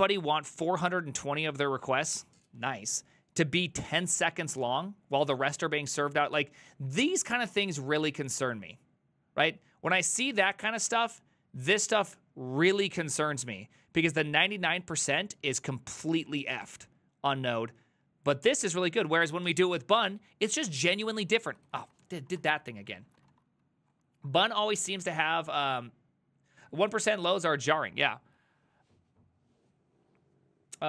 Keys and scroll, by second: 20.6 ctrl+a, 20.7 [, 20.9 ctrl+u, 21.1 ctrl+u, 21.2 ctrl+u, 21.5 ctrl+u, 21.7 ctrl+u, 21.9 ctrl+u, 22.4 shift+a, 22.8 ctrl+c, 23.0 ctrl+c, 23.1 ctrl+c, 23.3 ctrl+-.